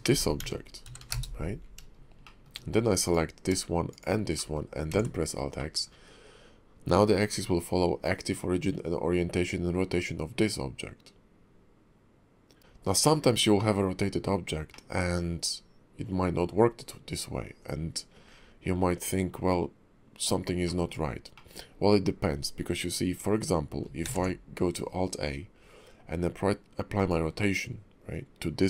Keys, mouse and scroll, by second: 0.1 r, 2.2 shift+middle click, 3.1 click, 3.9 shift+click, 4.4 middle click, 4.9 alt+x, 5.6 middle click, 12.6 middle click, 12.6 scroll up 2, 13.0 shift+middle click, 13.5 middle click, 14.7 middle click, 16.5-17.8 scroll down 2, 20.6 middle click, 21.3 middle click, 21.7-23.8 scroll up 1, 24.0 ctrl+a.